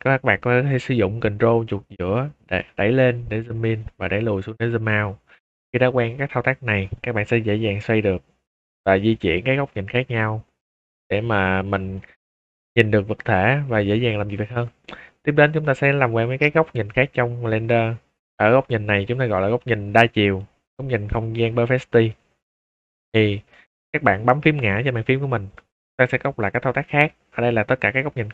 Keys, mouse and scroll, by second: 2.1-4.8 ctrl+middle drag, 5.3-9.0 middle drag, 9.2 shift+middle click, 10.6 scroll up 1, 10.7-11.4 middle drag, 11.7 shift+middle drag, 12.4-14.0 middle drag, 14.3 shift+middle drag, 14.9 scroll up 2, 15.0 scroll down 2, 15.9 scroll up 2, 18.6 scroll down 2, 19.1-19.5 middle drag, 20.1 shift+middle drag, 23.0 middle click, 23.0 scroll up 2, 23.5 shift+middle drag, 25.0 `.